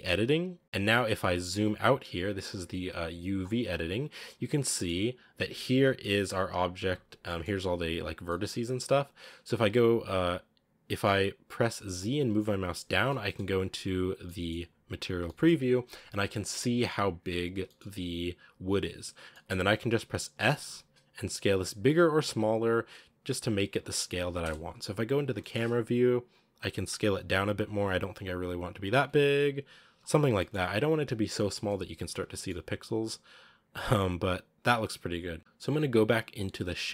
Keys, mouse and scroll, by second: 0.0 click, 0.6-6.7 shift+middle drag, 6.7 a, 12.3 z, 12.9 middle click, 13.3-14.3 scroll up 3, 14.3-15.6 middle drag, 15.6-17.5 scroll up 1, 17.5-20.6 shift+middle drag, 20.6 s, 24.3 KP_0, 24.9-26.4 scroll up 5, 25.2 shift+middle click, 26.4 s, 28.7 Tab, 29.1 Tab, 29.4 s, 29.8 Tab, 30.1 scroll down 1, 30.2-32.0 shift+middle drag, 32.0 z, 32.2 shift+middle click, 32.4-33.4 scroll up 1, 33.8 scroll up 1, 35.0 scroll down 2.